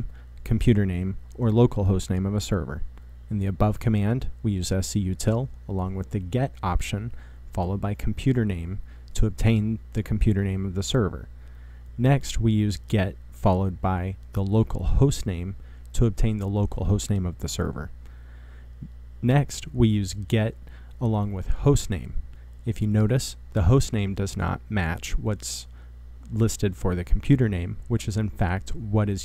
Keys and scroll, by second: 0.0-2.1 typing, 4.1-10.7 typing, 12.7-14.4 typing, 15.7-20.0 typing, 21.3-29.2 typing.